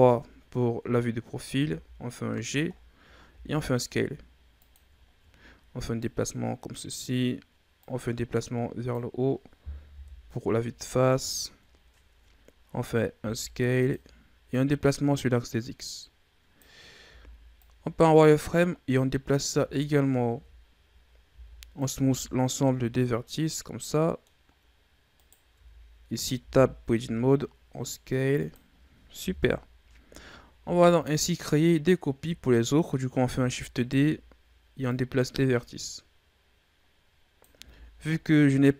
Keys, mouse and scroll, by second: 0.4-1.5 scroll up 10, 1.5 g, 2.6-3.2 scroll down 5, 3.2 s, 4.9-5.2 scroll down 4, 5.2-5.9 scroll up 2, 5.9-9.8 drag, 9.8 KP_1, 10.9 scroll down 2, 11.1-11.8 scroll up 11, 11.9 ctrl+scroll up 2, 12.6-13.1 scroll up 1, 13.1 s, 14.4-16.9 drag, 16.9 z, 17.5-19.3 drag, 19.3 z, 20.3 Tab, 21.1 w, 22.0 a, 22.3 scroll down 2, 22.6-24.3 middle drag, 24.3-25.0 scroll up 2, 25.0 right click, 25.4 Tab, 26.3 s, 29.2 KP_3, 30.2 ctrl+scroll up 4, 30.5 z, 33.1 shift+d, 34.8-37.4 drag, 37.4 z, 37.9-38.3 scroll down 2, 38.3 middle click.